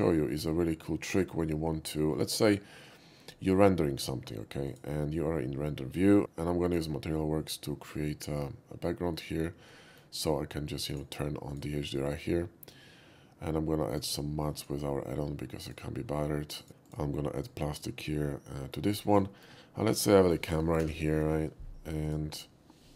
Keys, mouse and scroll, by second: 4.7 click, 6.7 click, 10.9 click, 11.5 click, 13.9 click, 14.6 click, 15.7 click, 16.6 click, 16.8 click, 17.4 click, 17.7 middle click, 18.8 middle click, 19.4 middle click, 21.1 Page_Down, 22.0 click.